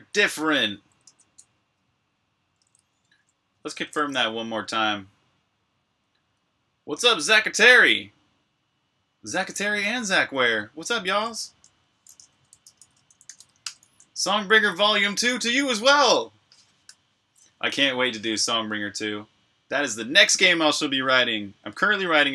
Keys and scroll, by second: 0.0-0.9 typing, 0.9 super+q, 12.1-13.7 typing.